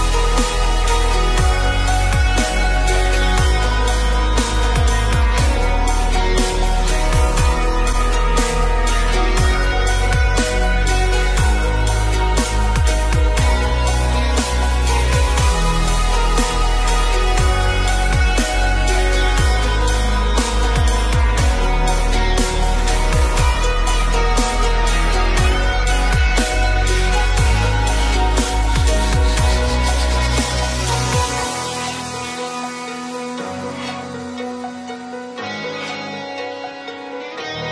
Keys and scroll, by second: 29.7 ctrl+t, 36.4 Return.